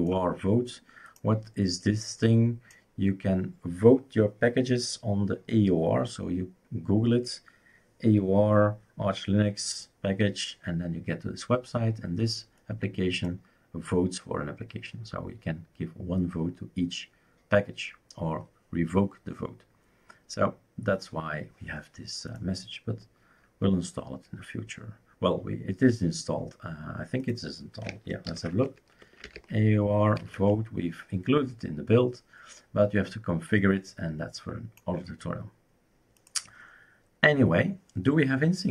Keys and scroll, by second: 28.3 ctrl+alt+t, 28.8-30.7 typing.